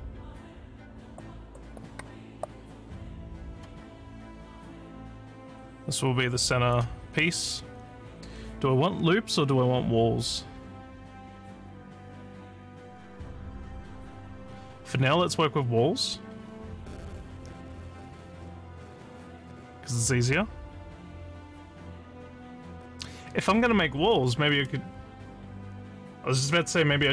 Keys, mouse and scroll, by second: 3.4 click, 4.4-6.8 drag.